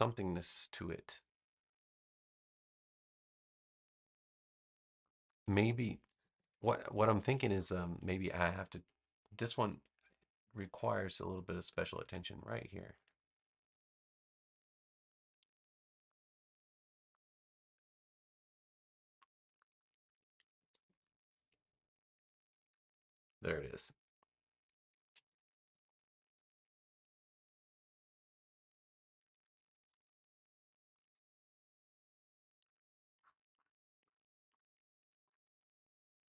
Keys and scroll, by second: 5.9 super+=, 6.8 space, 9.3 a, 20.6 super+-, 25.2 super+-, 29.3 super+=, 29.5 super+=, 30.3 space.